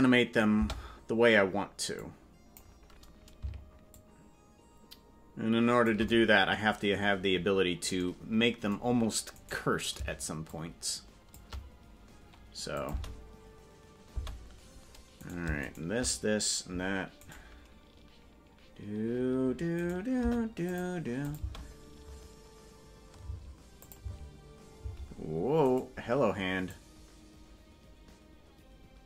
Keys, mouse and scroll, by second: 0.5 space, 2.0 click, 3.9-5.9 shift+drag, 9.4-10.5 right drag, 10.5 shift+click, 12.7-14.2 drag, 12.9 space, 14.1 space, 15.3 right click, 15.7 shift+right click, 17.2-19.2 right drag, 20.1 right click, 20.2 Delete, 21.2-23.7 drag, 21.4 space, 23.2 space, 23.8-24.9 drag, 24.0 space, 24.8 space, 25.7 right click, 26.7-29.0 drag.